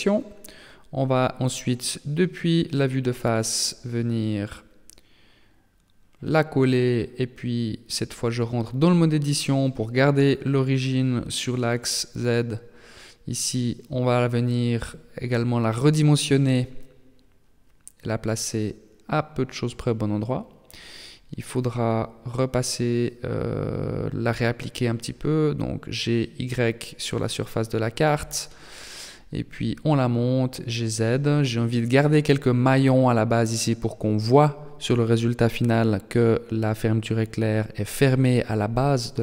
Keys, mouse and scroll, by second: 0.3 KP_3, 1.5 KP_1, 3.4 g, 6.3 KP_3, 7.3-8.6 scroll up 3, 8.6 shift+middle click, 9.1 Tab, 10.3 g, 11.5 s, 13.3-13.8 scroll up 6, 14.9 g, 18.2 s, 21.7 Tab, 22.3 middle click, 24.9 g, 28.8 g, 31.1 KP_3, 31.9 shift+middle click, 32.5 shift+scroll down 1, 33.3 shift+scroll up 1, 33.3 shift+middle click, 34.1-35.2 scroll up 1, 35.2 g, 37.3 Tab.